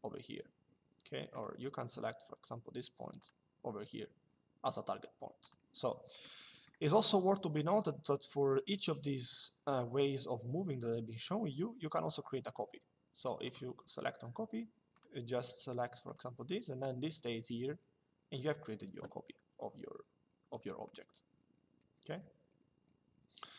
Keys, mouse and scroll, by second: 1.0 click, 2.9 click, 5.1 click, 13.1 click, 14.7 click, 15.8 click, 20.5 click.